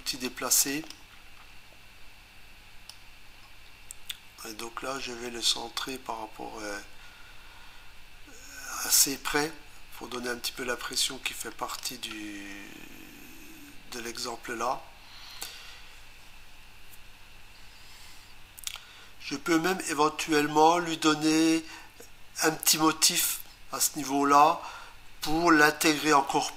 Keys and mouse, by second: 0.7 click, 2.9 click.